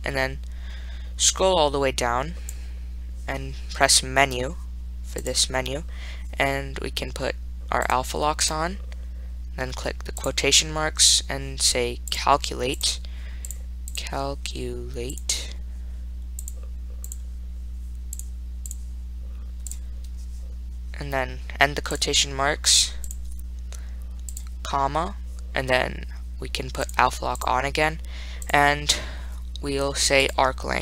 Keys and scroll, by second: 2.7 Down, 5.5 Return, 13.7 ), 15.4 5, 16.7 ), 18.4 4, 19.9 ., 24.7 ,.